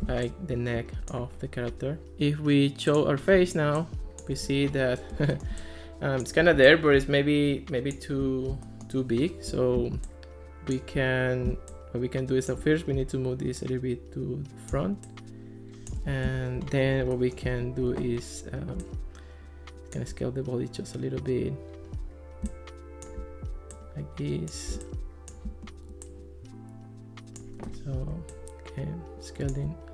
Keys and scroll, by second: 16.3 alt+r.